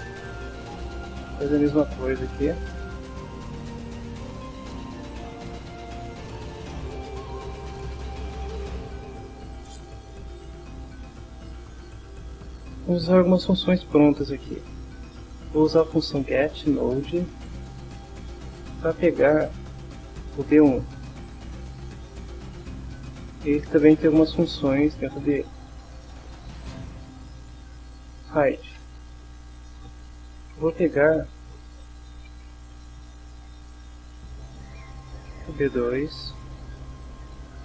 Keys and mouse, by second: 1.3 click, 2.5 click, 3.6 click, 4.8 click, 7.0 click, 8.8 click, 9.4 click, 10.4 click, 11.3-12.7 drag, 15.6-17.7 typing, 17.9 Return, 19.7 Down, 21.6 Return, 22.7 shift+0, 25.4 ., 26.5 h, 27.4 i, 28.8 Return, 29.8 Return, 30.2-33.9 typing, 34.4 Return, 36.0 Down, 36.9 Return.